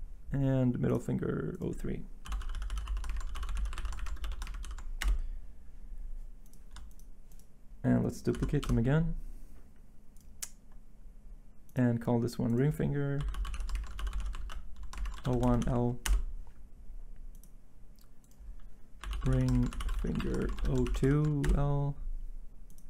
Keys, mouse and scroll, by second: 2.0-4.6 typing, 5.0 Return, 5.9 typing, 8.1-8.8 typing, 12.9-16.1 typing, 18.7-21.0 typing, 21.4 Return.